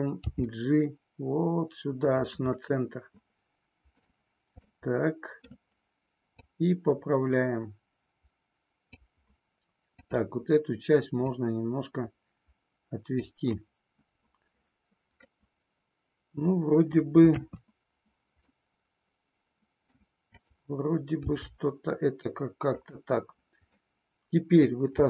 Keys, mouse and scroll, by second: 0.2 g, 2.6-5.5 middle drag, 2.6 scroll up 1, 4.1-4.5 scroll down 1, 6.4-8.9 drag, 9.9 click, 11.3-13.2 drag, 15.3-16.9 middle drag, 17.3 KP_3, 18.4-20.2 middle drag, 20.3 click, 21.2 g, 22.7 click, 23.8 middle click, 24.9 e.